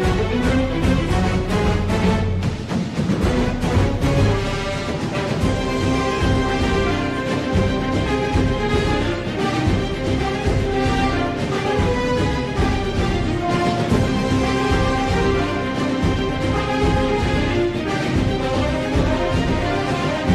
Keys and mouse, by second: 2.0 Tab, 2.9-4.7 middle drag, 5.1-7.5 middle drag, 9.0 Tab, 10.8 1, 12.9 KP_3, 14.9 z, 16.6 shift+middle click, 17.7-19.1 drag.